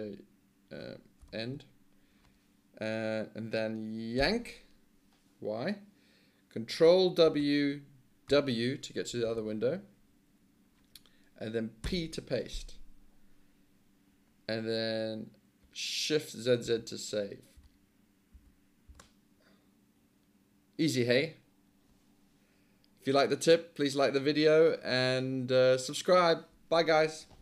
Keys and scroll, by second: 1.2 e, 4.2 y, 8.3 ctrl+w, 11.9 p, 16.7-18.9 typing, 24.9 F9.